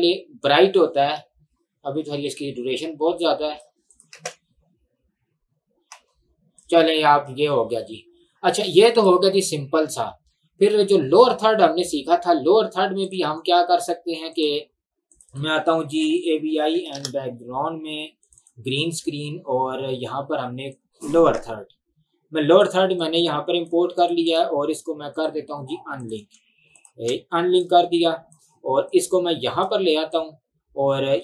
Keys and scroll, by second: 1.3 space, 4.3 space, 6.0 space, 16.0-16.7 typing, 16.9 Return, 21.4 alt+Tab, 26.3 Delete.